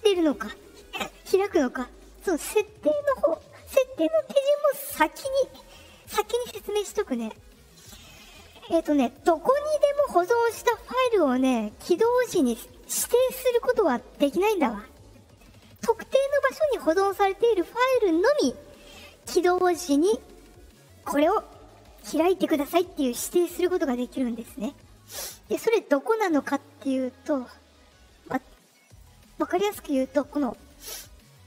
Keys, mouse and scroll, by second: 4.3 click, 6.5 click, 8.3 click, 8.9 click, 25.2 click, 28.8 click.